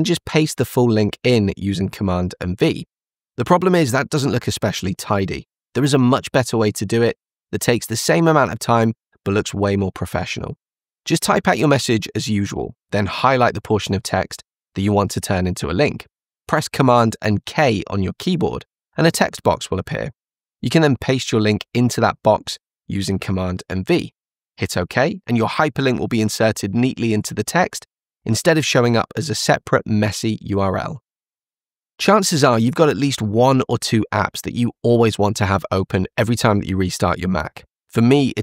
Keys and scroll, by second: 1.5 super+c, 5.3 super+v, 17.2 super+k, 23.6 super+v.